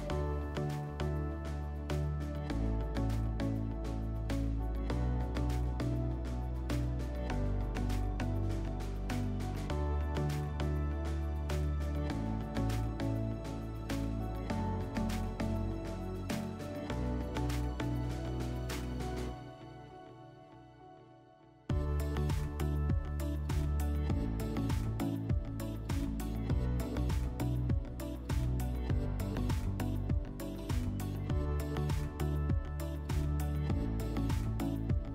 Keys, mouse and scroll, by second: 0.0 click, 1.1 click, 3.4 click, 5.4 1, 9.2 click, 11.4 click, 12.8 4, 14.4 p, 15.7 middle click, 17.9 middle click, 21.9 click, 23.3 click, 24.9 click, 26.4 click, 28.0 click, 30.4 click, 34.9 click.